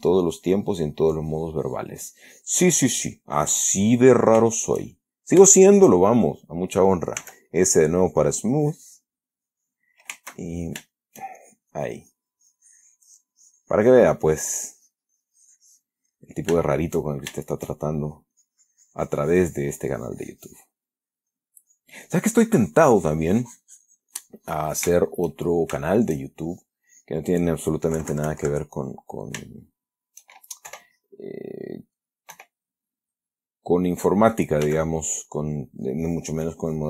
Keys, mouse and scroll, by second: 3.0 click, 3.6 click, 4.8-5.7 shift+middle drag, 5.8-6.3 shift+middle drag, 6.5 shift+middle click, 7.5 s, 7.8-8.2 middle drag, 9.4 click, 10.6-11.1 shift+middle drag, 11.2 shift+middle click, 12.4-14.5 shift+drag, 14.6 click, 15.7 click, 16.4-16.9 middle drag, 17.4-18.6 shift+middle drag, 18.7-21.1 shift+drag, 21.1 middle click, 21.6 click, 22.0-25.3 drag, 25.3-26.5 shift+middle drag, 26.7 shift+click, 27.3 shift+click, 28.3 KP_Subtract, 29.4 shift+middle click, 30.1 shift+middle click, 31.0 3, 32.6 3, 35.0 f, 35.5 click, 36.0-36.8 drag.